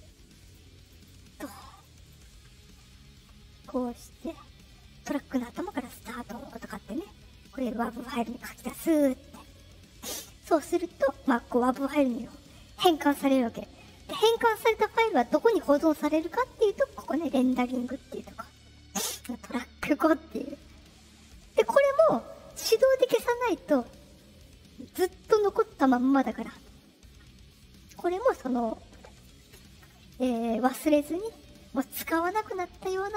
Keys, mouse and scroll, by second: 0.4 click, 0.8 click, 0.9 click, 1.7 click, 2.0 right click, 5.5 click, 7.5 click, 17.0 click, 32.7 click.